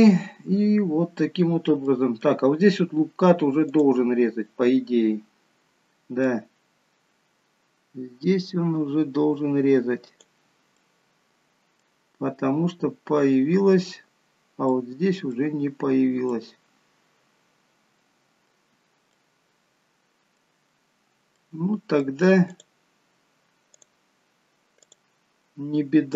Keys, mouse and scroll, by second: 0.0 middle click, 0.4 scroll up 2, 1.9 middle click, 3.8 click, 6.4 click, 10.9 middle click, 14.8 middle click, 16.3 middle click, 21.5 middle click, 22.6 click, 23.8 click, 24.9 click.